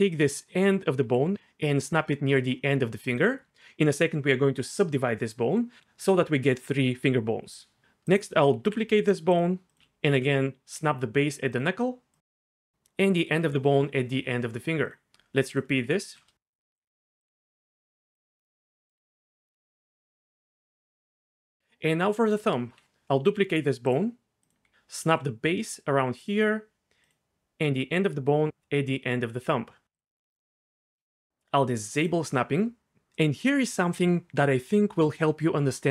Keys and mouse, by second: 1.0 g, 3.0 click, 8.1 click, 8.6 shift+d, 9.3 click, 9.8 ctrl+z, 10.1 ctrl+z, 10.7 g, 11.5 click, 12.3 g, 14.8 click, 16.1-19.5 typing, 16.5 click, 17.1 click, 17.5 click, 18.1 click, 18.9 click, 19.1 click, 20.0 click, 20.9 g, 23.3 shift+d, 23.9 click, 24.7 ctrl+z, 25.0 g, 26.2 click, 27.7 g, 29.9 click.